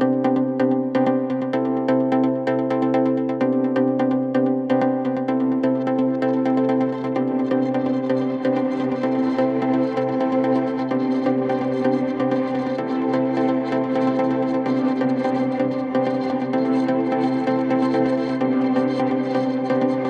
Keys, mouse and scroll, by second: 0.2 double click, 0.5 right click, 1.6 double click, 2.2 typing, 3.4-5.8 typing, 5.3 scroll down 7, 5.6 scroll up 6, 6.1-6.6 scroll down 4, 6.3 middle click, 6.8 scroll up 5, 7.3 scroll, 7.4 scroll up 5, 7.4 m, 8.1 m, 8.2 scroll down 6, 8.4 scroll up 5, 9.1-9.4 scroll up 14, 9.4 scroll down 4, 10.2-10.6 scroll down 20, 10.7 m, 10.8 scroll up 8, 11.9 typing, 12.2 scroll up 8, 12.9 typing, 13.3-13.7 scroll down 12, 14.9-15.5 scroll up 10, 15.5-15.9 scroll down 23, 15.9 typing, 16.3 middle click, 16.6 scroll up 3, 17.4 scroll up 1, 17.4 scroll down 6, 18.0 middle click, 18.2 middle click, 18.6-19.2 scroll up 15, 19.2 typing, 19.5-20.0 scroll down 16.